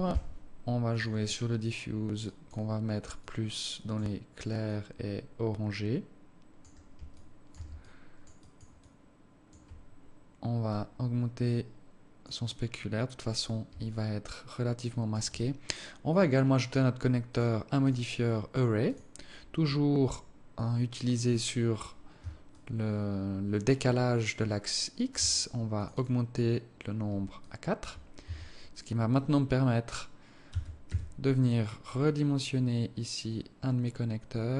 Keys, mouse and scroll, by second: 1.2 click, 8.1 alt+click, 8.7 alt+click, 9.1 alt+click, 11.0 click, 12.9-13.3 scroll down 3, 14.1 alt+click, 16.3 click, 17.5 click, 18.1 click, 22.8 shift+click, 26.1 click, 26.3 click, 27.7 alt+click, 28.5 Tab, 30.8 s.